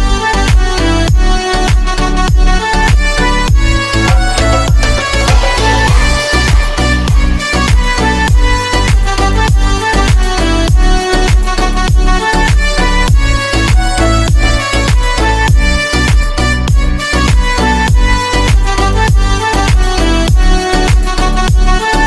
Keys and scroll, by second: 7.3 c, 9.1 c, 12.7 F3.